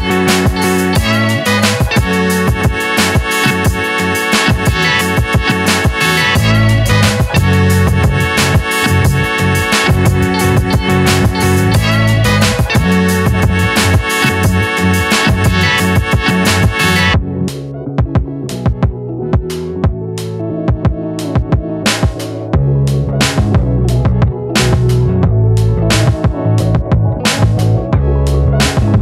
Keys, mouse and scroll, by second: 0.0-1.4 drag, 1.4 scroll down 2, 1.7 shift+middle click, 2.6 click, 3.6-5.4 drag, 5.4-7.4 middle drag, 8.3-9.2 middle drag, 9.2-10.4 scroll up 1, 10.4-12.4 scroll down 1, 12.5 click, 14.1 shift+right click, 14.8 shift+a, 18.0-19.9 middle drag, 20.5 click, 21.2-23.4 drag, 23.8 r, 26.2 click, 27.0 s, 28.3 g.